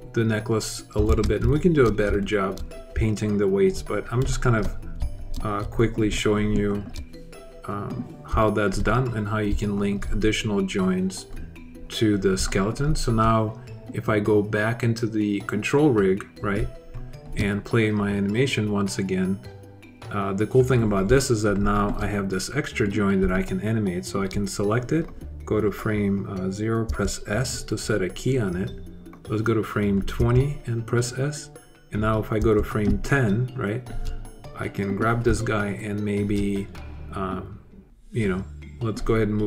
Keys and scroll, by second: 0.9 super+z, 26.6 s, 30.0 s, 32.2 s, 32.7 alt+s.